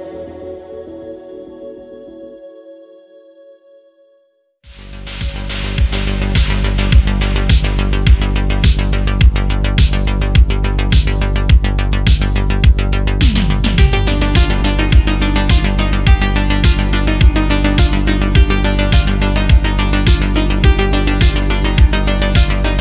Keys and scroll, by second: 0.8 ctrl+z, 1.1 ctrl+z, 4.8 ctrl+z, 7.6 ctrl+z, 8.0 ctrl+z, 8.5 ctrl+z, 9.1 ctrl+z, 13.4 ctrl+z, 13.8 ctrl+z, 14.5 ctrl+z, 17.9 ctrl+z, 18.7 ctrl+z, 20.3 ctrl+z.